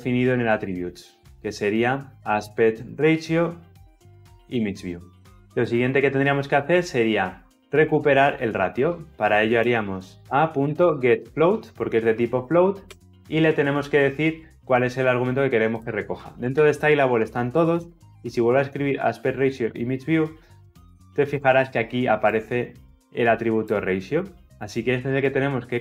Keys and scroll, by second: 12.7 Return.